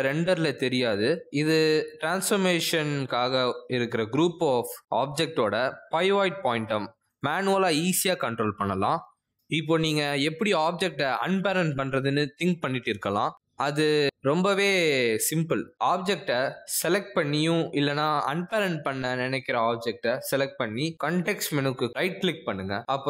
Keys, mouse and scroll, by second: 0.9 r, 1.4 g, 3.2 scroll down 1, 3.4 g, 4.4 middle click, 4.9 scroll up 2, 5.0 middle click, 5.5 middle click, 5.8 middle click, 6.0 r, 6.5 s, 7.3 middle click, 9.1 alt+s, 9.2 middle click, 10.2 middle click, 10.3-10.7 scroll up 3, 10.6 middle click, 10.9 scroll down 1, 11.1 middle click, 15.1 click, 15.4 r, 18.0 click, 22.1 right click.